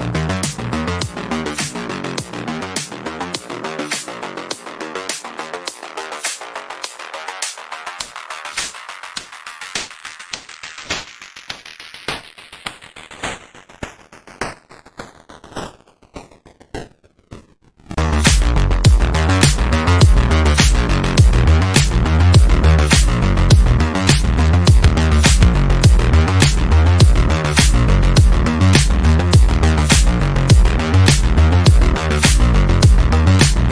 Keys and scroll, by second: 16.6 F3, 19.2 shift+F2, 19.4 Escape, 20.8 F3, 20.9 Escape, 22.4 Escape, 22.7 F3, 22.8 Escape.